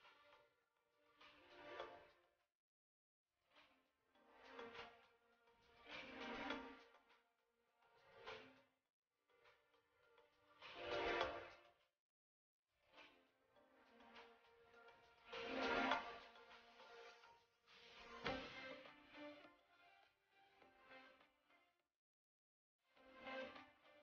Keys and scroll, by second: 9.3 ctrl+c, 10.5 ctrl+v, 18.8 ctrl+shift+].